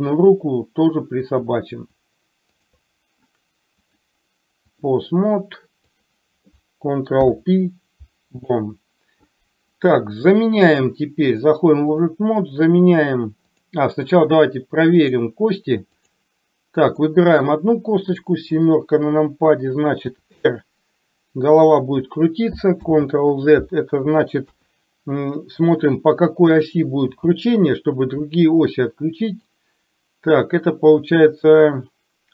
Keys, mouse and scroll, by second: 1.3 click, 2.6 shift+click, 4.0-5.0 drag, 7.2 ctrl+p, 11.3 click, 15.1-16.1 drag, 17.0 click, 18.6 KP_7, 20.2 r, 23.0 ctrl+z, 24.5 KP_3, 27.2 n, 29.5 click.